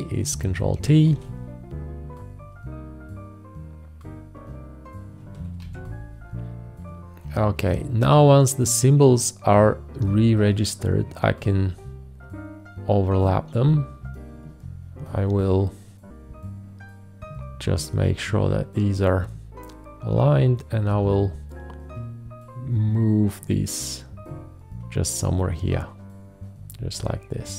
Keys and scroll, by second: 1.1 ctrl+t, 5.6 ctrl+t.